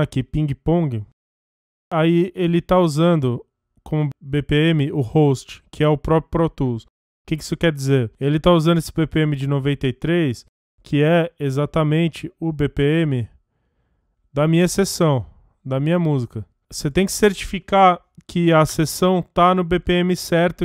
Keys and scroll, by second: 13.3 F1, 16.3 F1.